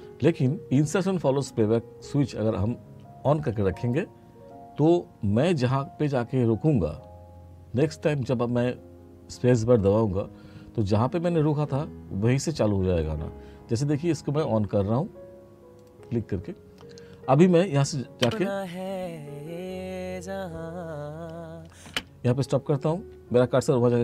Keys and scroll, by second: 18.3 space, 21.9 space.